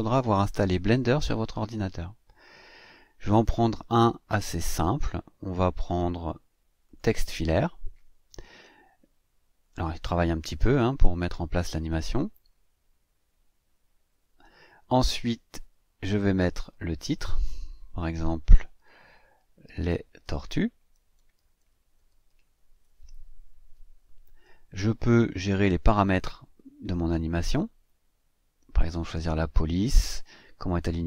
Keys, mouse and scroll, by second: 4.9-5.3 scroll down 2, 6.8 click, 16.4 click, 19.3-22.7 typing, 27.1-31.0 drag.